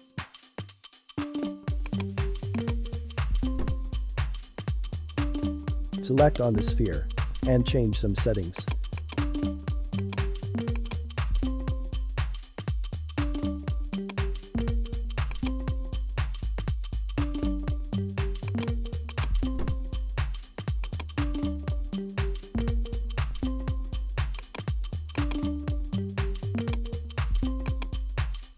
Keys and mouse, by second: 0.3-4.2 drag, 6.2 right click, 8.5 click, 8.9-16.2 drag, 18.4-20.9 drag, 24.4-26.6 drag, 27.6 click.